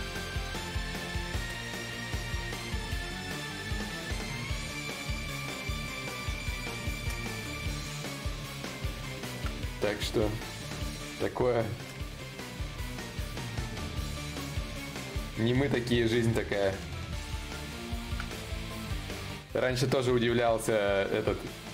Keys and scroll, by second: 13.9 ctrl+z.